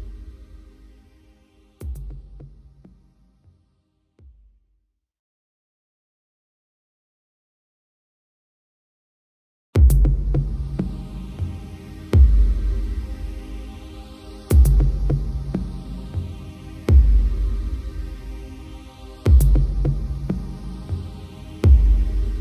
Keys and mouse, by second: 0.1 right click, 1.4 right click, 2.3 right click, 3.7 right click, 4.5 right click, 5.5 right click, 8.6 right click, 9.4 right click, 9.7 right click, 12.4 right click, 15.8 right click, 16.1 right click, 17.5 right click, 18.6 right click, 19.2 right click, 20.1 right click, 21.2 right click, 21.5 right click, 22.1 right click.